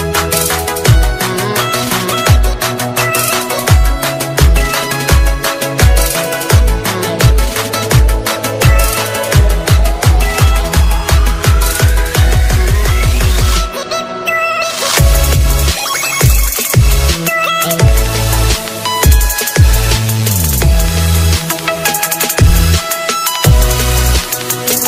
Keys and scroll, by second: 16.6 alt+space.